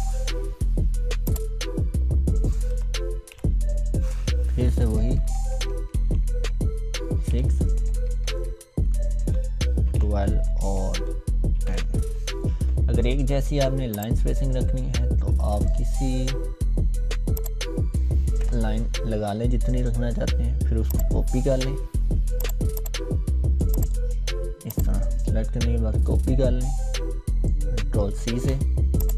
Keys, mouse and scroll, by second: 0.4 scroll up 1, 1.3 click, 2.7 Num_Lock, 4.8 shift+-, 7.1 6, 9.4-12.2 typing, 13.9-15.8 drag, 18.4 BackSpace, 20.9-22.7 drag, 28.2 ctrl+c, 29.0-29.1 drag.